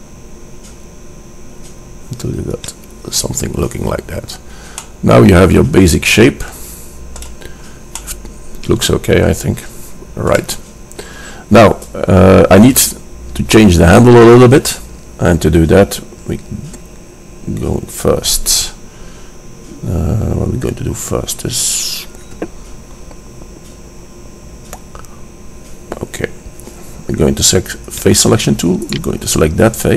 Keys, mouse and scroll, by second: 4.1-5.9 middle drag, 6.6 middle click, 7.6-8.8 middle drag, 28.0-29.9 drag, 29.0-29.9 right drag.